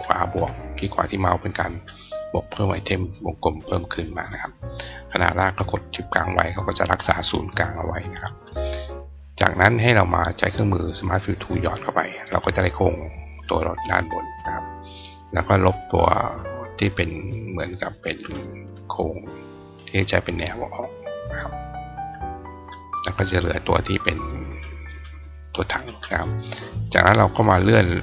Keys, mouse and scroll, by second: 10.3 click, 11.3 click, 14.4 click, 17.3 click, 20.6 click, 22.4 click, 24.2 click, 24.7 click.